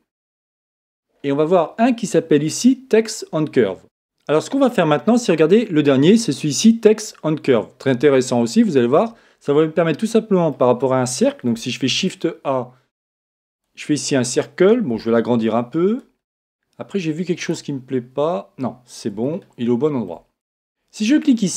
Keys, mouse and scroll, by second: 1.1-2.3 scroll up 1, 2.3-3.1 scroll up 1, 3.1 scroll up 1, 9.8-11.8 middle drag, 11.9 shift+a, 14.9 s, 16.0 click, 16.2-19.0 middle drag, 17.4 right click, 19.2-21.1 middle drag.